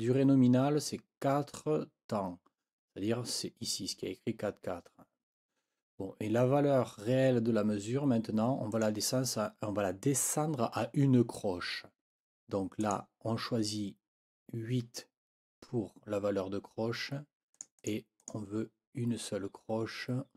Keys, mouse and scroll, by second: 8.7 click, 12.8 click, 17.5 click, 18.2 click.